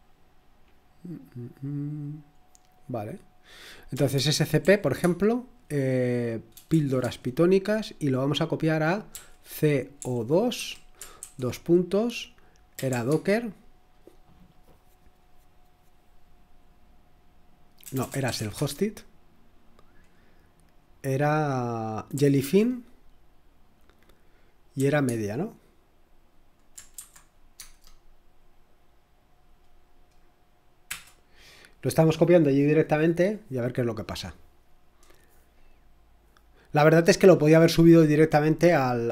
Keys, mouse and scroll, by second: 3.6-5.1 typing, 6.7 typing, 9.1-11.2 typing, 12.4-13.2 typing, 14.2-15.0 typing, 17.8-18.8 typing, 22.2 typing, 24.7 typing, 26.9-28.0 typing, 30.9 Return.